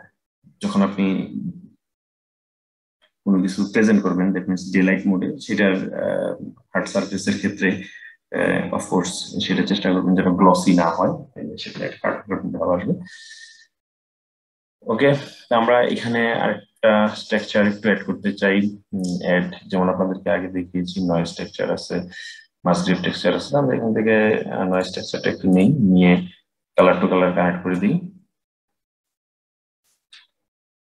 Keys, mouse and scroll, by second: 16.5-18.7 middle drag, 18.7-21.8 drag, 26.5-30.8 drag.